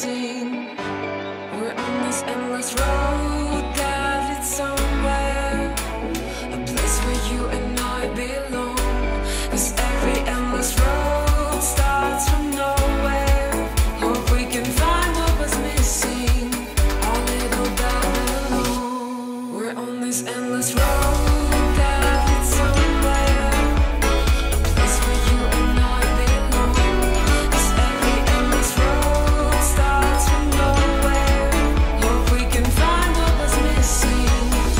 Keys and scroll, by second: 5.7 super+z, 12.2 super+z, 13.4 super+z, 13.8 super+z, 25.7 space, 31.1 space.